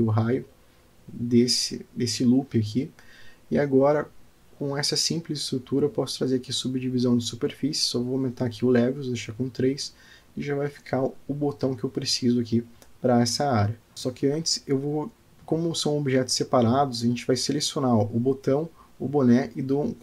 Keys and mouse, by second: 0.6 click, 2.2 Tab, 3.1-4.2 drag, 5.9 click, 7.0 click, 8.3 click, 9.9-12.3 middle drag, 13.9 alt+p, 16.2 click, 17.0 shift+click, 18.9 ctrl+p.